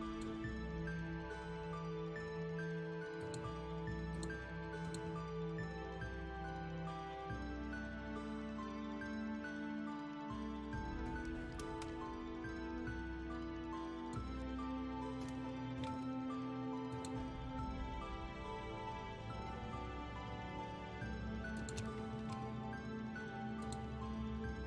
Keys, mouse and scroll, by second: 3.2 click, 4.2 click, 4.9 click, 13.9 shift+click, 16.9 click, 18.4 scroll down 1, 19.0 scroll down 1, 19.4 scroll up 1, 19.7 scroll down 1, 21.6 shift+click, 23.6 click, 24.2 scroll down 1, 24.4 scroll down 1.